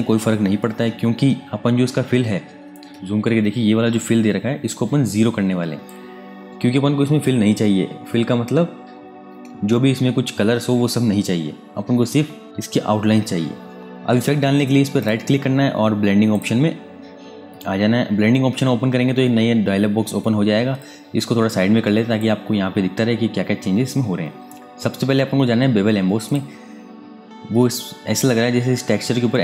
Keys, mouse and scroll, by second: 2.4 super+Num_Lock, 2.6 KP_Add, 9.2 super+KP_Subtract, 14.7 right click, 16.0 click, 20.3 space, 20.5 click, 20.9 space, 26.0 click.